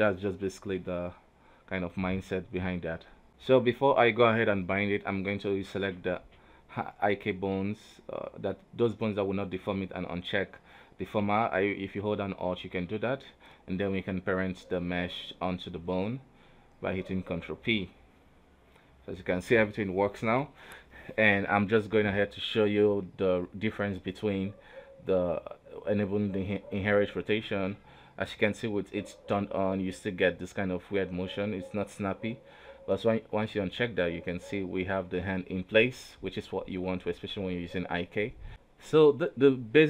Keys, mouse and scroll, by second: 0.0 Tab, 0.5 right click, 0.9 click, 1.7 Tab, 2.2-3.3 middle drag, 3.3 right click, 3.7-4.4 middle drag, 4.4 shift+right click, 5.4 click, 6.6 alt+click, 8.3 middle click, 8.9 right click, 9.1 g, 10.1 ctrl+Tab, 10.6 right click, 11.6 shift+right click, 12.4 ctrl+p, 14.5 ctrl+Tab, 14.7 right click, 15.0 g, 15.8 r, 17.2 right click, 17.4 middle click, 17.7 g, 21.4 right click, 22.9 click, 24.5 click, 25.5 click, 26.0 a, 26.4 alt+r, 26.6 alt+g, 27.0-27.7 middle drag, 27.7 right click, 27.8 KP_3, 28.2 g, 29.1-30.3 middle drag, 30.3 right click, 30.4 g, 33.3 right click, 34.4 click, 35.0 middle click, 35.8 right click, 36.0 g, 38.5 right click, 38.7 middle click, 39.4 ctrl+Tab.